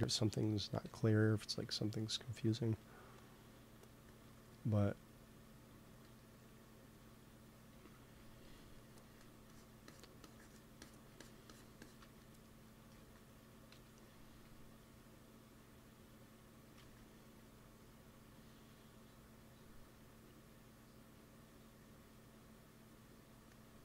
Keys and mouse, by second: 0.8 KP_1, 2.3 t, 3.1-5.3 drag, 4.2 t, 5.4 t, 6.2-8.7 drag, 7.7 t, 8.1 f, 9.0 f, 9.4-13.7 drag, 12.8 ctrl+s, 13.7 KP_1, 16.7 ctrl+s.